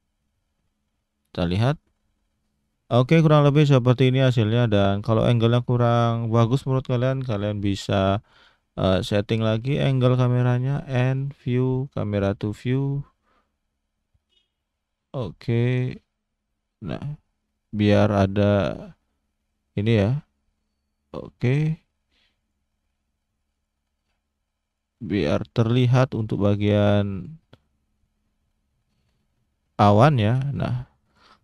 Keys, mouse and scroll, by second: 10.3 n, 11.1 click, 12.6 click, 12.9 n, 13.4 middle click, 22.4 click, 23.5 shift+click, 26.5 click, 27.6 middle click, 31.0 click.